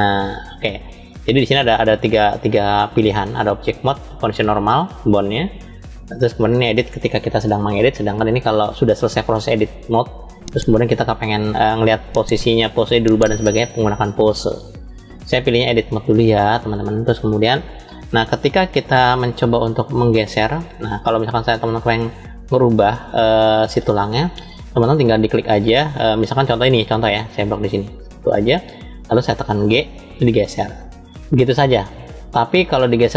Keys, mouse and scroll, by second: 0.8-15.8 drag, 18.1-19.8 middle drag, 20.1 scroll up 2, 21.3-22.2 scroll down 2, 22.4 shift+middle click, 23.5-24.4 scroll up 1, 27.2 click, 29.5 g.